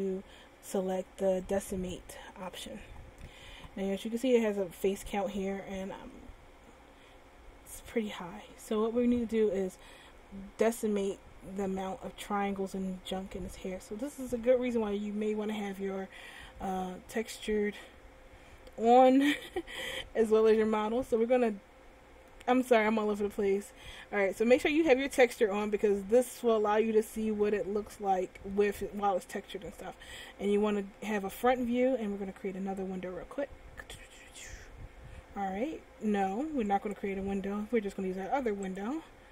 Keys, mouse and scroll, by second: 6.3 middle click, 9.9 middle click, 12.9 middle click, 15.6 a, 19.4-20.1 scroll up 1, 20.1 middle click, 21.5 middle click, 27.0-27.9 scroll down 1, 27.9 middle click, 33.5 click, 37.2 click.